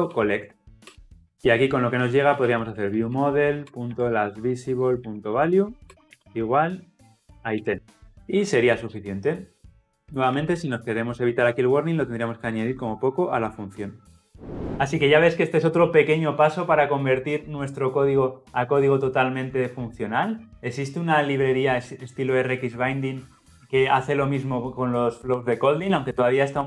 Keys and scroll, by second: 3.7 Return, 8.0 ctrl+alt+o, 9.8 ctrl+z, 10.5 alt+Return.